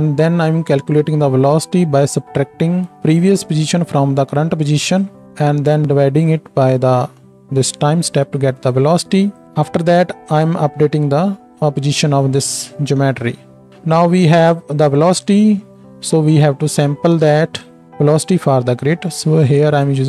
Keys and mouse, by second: 9.3 click, 9.3 middle click, 13.9-14.9 drag, 13.9-20.0 middle drag.